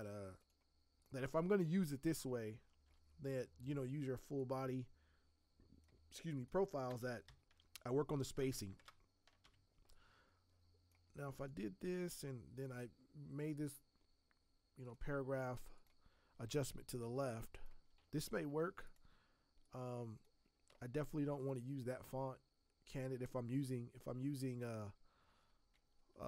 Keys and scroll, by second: 2.8 t, 6.8 space, 8.3 space, 8.7 ctrl+Return, 9.4 v, 18.5 t, 26.1-26.2 typing.